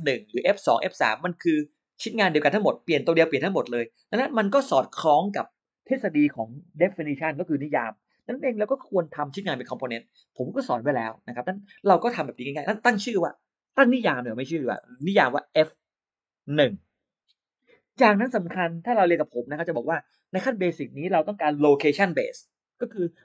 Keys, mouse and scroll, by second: 14.9 Caps_Lock, 15.6-17.0 typing.